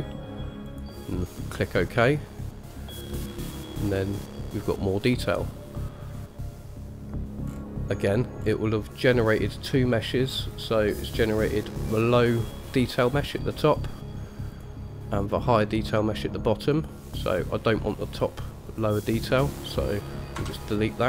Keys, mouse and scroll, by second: 2.9-3.8 middle drag, 4.1-4.5 scroll up 1, 4.5-6.5 middle drag, 7.7-8.1 scroll down 2, 8.6-9.2 scroll down 1, 9.2-10.7 scroll down 1, 10.7 click, 11.7 click, 14.8 drag, 15.5 click, 17.0 click, 18.4 click, 18.9 click, 20.6 Delete.